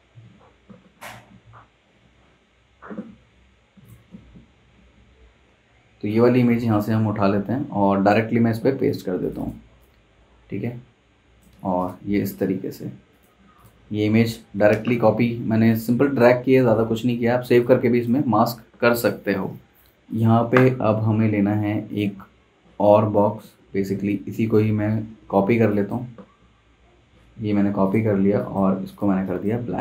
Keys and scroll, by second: 6.5 super+Tab, 14.7 super+Tab, 16.5 super+Tab, 23.5 super+z, 24.2 super+c, 25.1 super+f, 26.1 super+z, 27.1 super+z, 29.7 super+z.